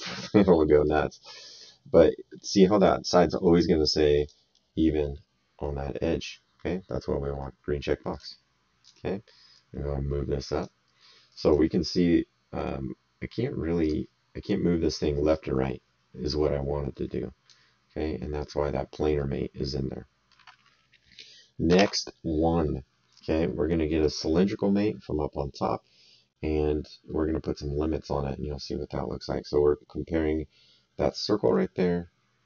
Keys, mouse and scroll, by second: 0.8 click, 4.1 click, 8.1 click, 11.3 right click, 13.8 click, 14.9 click, 18.4 click, 19.1 middle click, 21.7 alt+Tab.